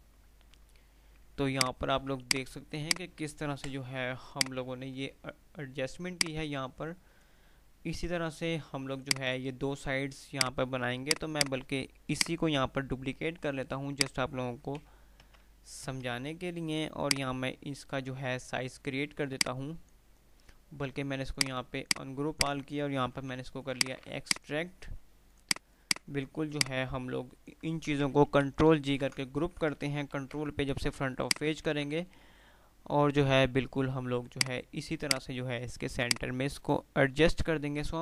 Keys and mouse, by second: 1.7 click, 2.2 click, 3.0 alt+click, 3.7 Delete, 4.5 click, 5.2 F2, 6.0 click, 6.3-7.5 F2, 9.2 click, 12.2 right click, 13.7 click, 17.2-20.3 drag, 23.5 x, 23.9 click, 25.3 Delete, 25.3 click, 25.6 click, 26.7-27.7 click, 28.0 ctrl+g, 28.5 Delete, 29.0 ctrl+z, 30.2 shift+Page_Up, 31.6-32.5 typing, 34.3-38.0 drag.